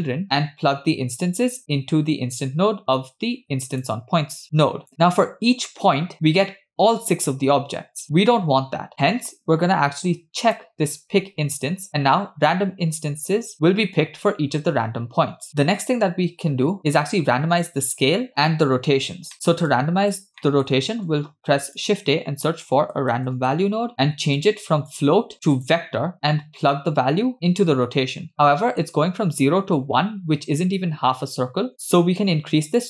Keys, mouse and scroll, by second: 0.1 click, 0.2 middle click, 0.2-1.3 scroll down 2, 1.4 click, 2.3 click, 10.5 click, 19.3 middle click, 19.7 click, 20.4 middle click, 20.9 shift+a, 24.9-25.8 drag, 26.8-27.8 drag, 28.3 scroll down 1, 28.4 middle click, 32.2-32.8 shift+drag.